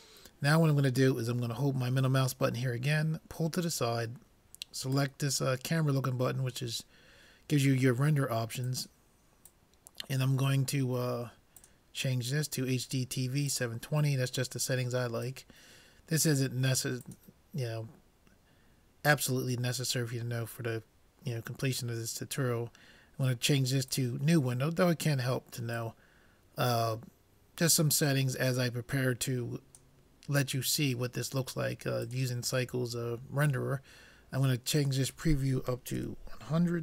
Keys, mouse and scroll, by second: 2.9-4.7 middle drag, 4.9-6.6 drag, 9.0-11.2 drag, 11.6-13.3 drag, 15.2-17.0 drag, 17.1-18.8 drag, 25.8-27.7 drag, 32.0-33.8 drag, 34.8-36.6 drag.